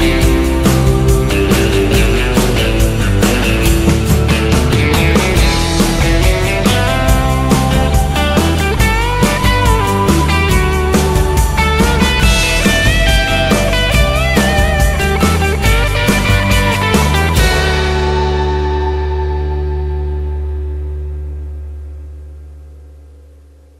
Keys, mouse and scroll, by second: 3.2 Tab, 3.5 Tab, 8.9 KP_0, 10.5 KP_0, 12.8 Tab, 15.8 a, 16.0 Tab, 16.3 KP_Subtract, 16.7 KP_0, 18.9 click, 20.6 KP_0, 21.8-23.7 middle drag.